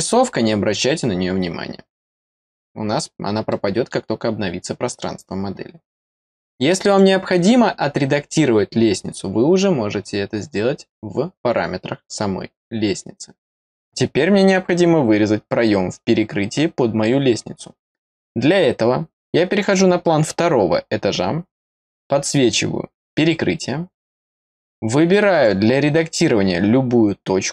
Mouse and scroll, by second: 3.4 middle click, 6.8 click, 19.5 click, 21.4 click, 25.3 click.